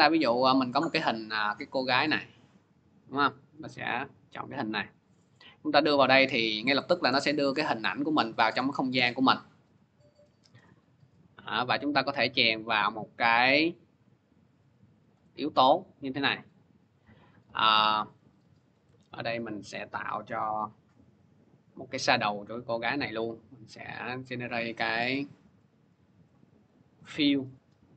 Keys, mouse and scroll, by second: 0.6 click, 0.8 middle click, 0.9-1.8 scroll, 1.8-2.7 scroll, 3.2 click, 3.4 click, 6.1 scroll, 6.9 scroll, 7.8 scroll, 8.8-9.3 scroll, 11.2 scroll, 14.8 shift+click, 14.8-16.1 scroll, 16.1-17.7 scroll, 17.7 click, 19.7 ctrl+d, 22.6 click, 23.5 click, 26.4 click.